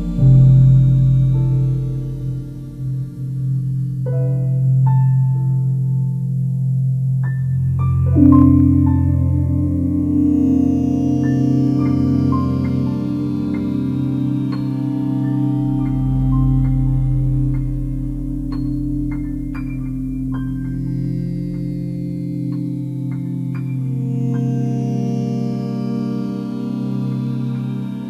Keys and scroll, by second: 10.9 ctrl+alt+shift+e.